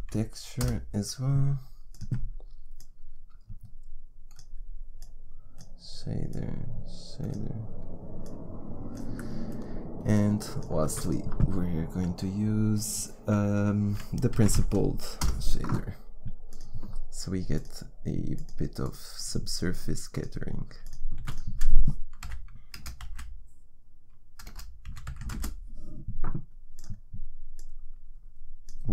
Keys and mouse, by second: 2.7-10.0 drag, 10.0-11.5 middle drag, 10.8 shift+a, 17.4-24.3 drag, 21.1 shift+a.